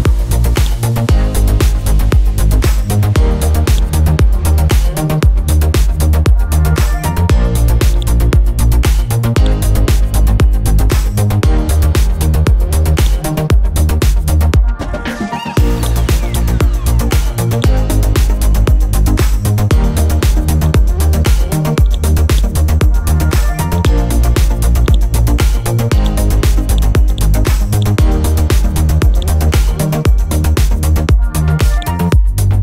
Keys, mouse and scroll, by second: 0.6 click, 1.6 scroll down 1, 2.5 scroll up 1, 3.7-7.6 drag, 8.5 scroll up 1, 9.4-11.4 drag, 13.0 shift+click, 15.3 b, 15.8 click, 16.6 click, 17.3 click, 17.9 scroll down 1, 18.9 scroll up 1, 19.7 scroll down 1, 20.6 click, 20.9 scroll up 1, 21.9 click, 22.6 scroll down 1, 23.2 scroll up 1, 23.8 click, 27.8 right click, 28.2 scroll up 1, 29.2 click, 30.1-31.7 scroll down 1, 31.7 click, 32.3-32.6 scroll up 1.